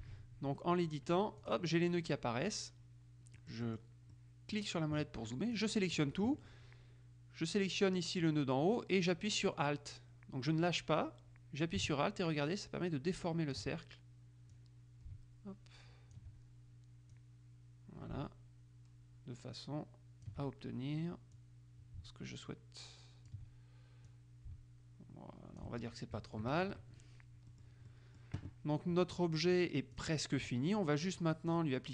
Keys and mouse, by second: 0.0 ctrl+z, 1.6 click, 3.6 middle click, 5.7 click, 8.4-14.2 drag, 14.7-16.8 drag, 17.3-20.9 drag, 21.5-23.9 drag, 24.2-26.2 drag, 26.5 KP_Subtract, 27.6 click, 29.6-30.7 drag, 31.7 click.